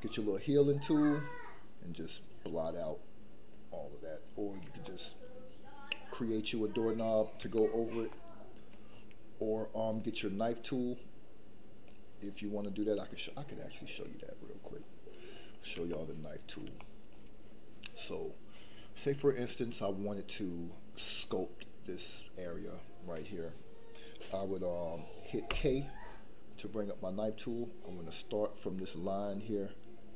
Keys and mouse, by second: 4.8 shift+middle click, 7.5 shift+middle click, 8.1 middle click, 11.9-13.3 drag, 15.9 shift+middle click, 16.8 shift+middle click, 25.5 k.